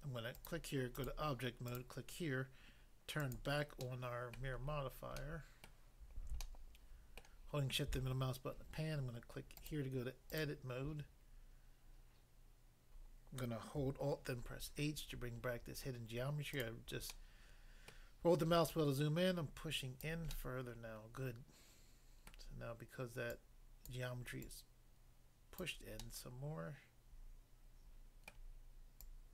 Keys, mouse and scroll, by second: 0.3 click, 0.5 click, 0.9 click, 1.0 click, 1.7 click, 1.8 click, 3.2 click, 3.8 click, 3.8 middle click, 4.4 middle click, 4.6 scroll down 1, 5.1 scroll down 1, 5.2 middle click, 5.6 middle click, 6.4 shift+middle click, 9.6 click, 9.6 click, 10.3 click, 10.4 click, 14.4 alt+h, 15.0 scroll up 1, 16.6 click, 17.2 middle click, 17.9 middle click, 18.7 click, 20.0 click, 20.3 middle click, 22.3 middle click, 23.4 click, 23.9 click, 24.5 click, 25.6 click, 26.0 middle click, 28.3 middle click, 29.0 click.